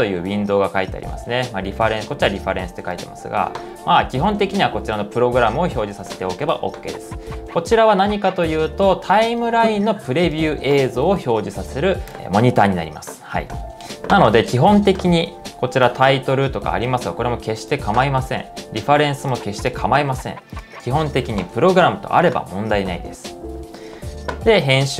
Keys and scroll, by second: 0.0-0.4 typing, 24.4-24.9 typing.